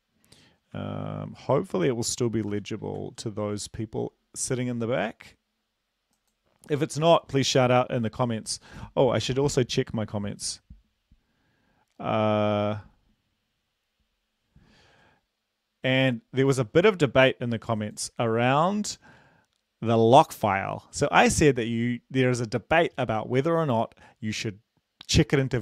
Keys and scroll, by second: 0.7 BackSpace, 2.1-2.5 typing, 3.0 ctrl+s.